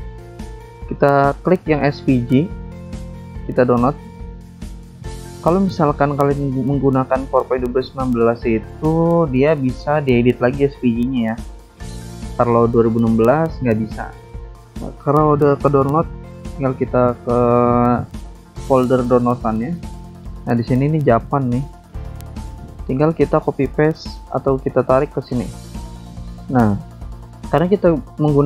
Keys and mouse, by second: 3.5 click, 4.7 click, 14.3 alt+Tab, 15.7 alt+Tab, 17.9 click, 20.8 click, 22.2 click, 22.7 click, 23.7 alt+Tab, 24.5 alt+Tab, 25.0 alt+click, 25.5 alt+Tab, 26.2 click, 26.5 alt+Tab, 28.0 click.